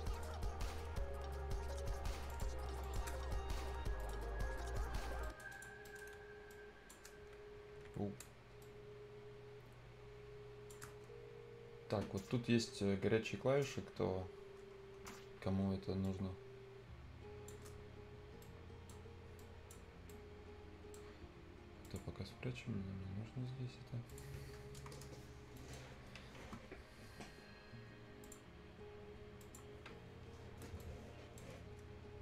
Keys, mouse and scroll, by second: 1.3-2.2 scroll down 1, 2.2 click, 3.1-3.9 shift+scroll down 1, 3.9 click, 4.9 scroll down 1, 5.0 scroll up 1, 5.2 right click, 5.5 click, 5.7 scroll up 1, 5.8 right click, 6.5-13.0 drag, 14.7-15.0 scroll down 1, 16.0-17.7 shift+drag, 17.7-18.0 scroll down 1, 18.1 scroll up 1, 18.4 right click, 19.3 click, 20.0-21.8 right drag, 21.8 click, 24.4-24.9 scroll down 1, 24.9 Return, 25.3 scroll up 1, 25.5 right click, 28.2 click, 30.7-32.2 right drag.